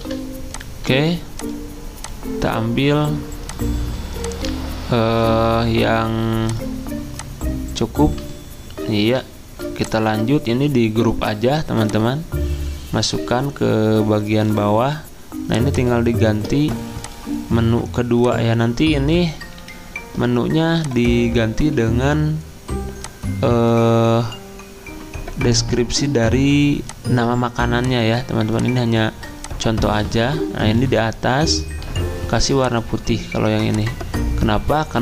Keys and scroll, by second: 5.1 c, 11.1 ctrl+g, 19.6 2.